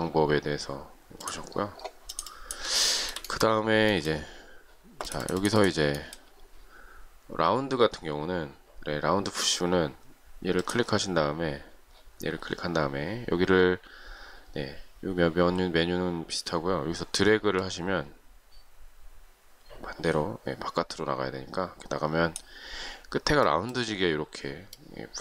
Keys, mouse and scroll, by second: 3.0 shift+middle click.